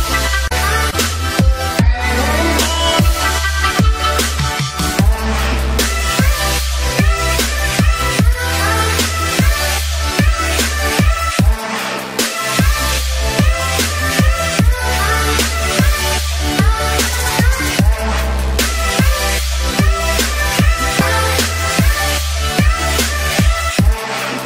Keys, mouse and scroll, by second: 1.0 shift+click, 2.6 ctrl+j, 4.2 ctrl+z, 5.6 click, 7.3 ctrl+j, 8.0 click, 9.3-11.8 typing, 13.1 click, 14.2-14.8 scroll down 1, 14.8 click, 16.4 ctrl+j, 17.1-18.7 scroll down 1, 19.8-20.1 scroll up 1, 20.1 ctrl+click, 21.2 scroll up 1, 22.1 click.